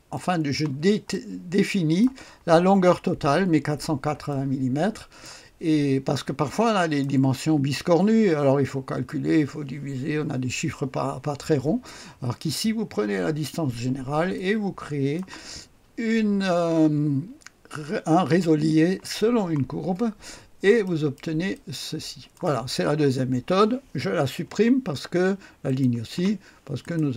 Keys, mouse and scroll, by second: 1.1 click, 4.3 click, 6.1 click, 14.3-15.9 drag, 20.1-20.9 scroll up 1, 20.9 right click, 21.5-22.6 drag, 24.4 Delete, 25.7 click, 26.1 Delete, 26.8 click.